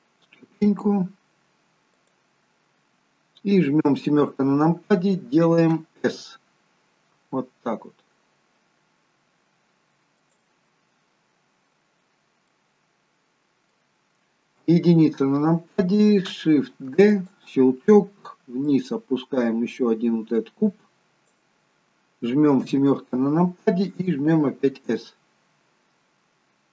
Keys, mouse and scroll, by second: 3.8 KP_7, 6.0 s, 12.5 middle click, 14.6 KP_1, 16.9 shift+d, 18.7 click, 22.6 KP_7, 24.5 s.